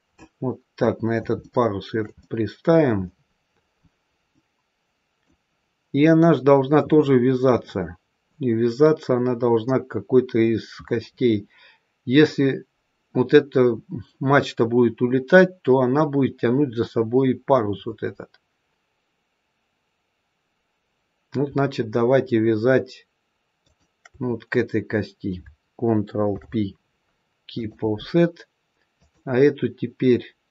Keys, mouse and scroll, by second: 0.1 middle click, 1.4 shift+middle click, 2.1 middle click, 4.2 middle click, 4.6 shift+middle click, 23.5 shift+click, 26.3 ctrl+p, 28.8 click.